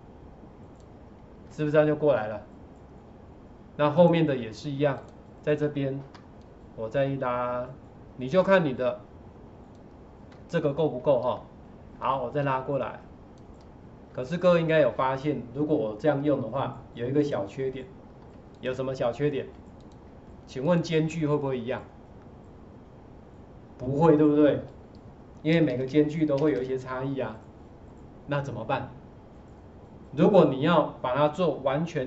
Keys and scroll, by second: 25.6 Left, 25.7 Left, 25.9 Left, 26.4 Left, 26.6 Left.